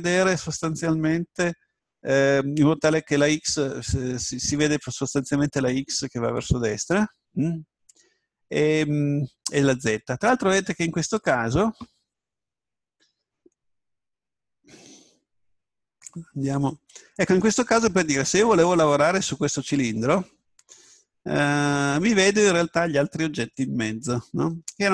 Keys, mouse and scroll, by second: 16.4 Tab, 22.2-24.9 middle drag.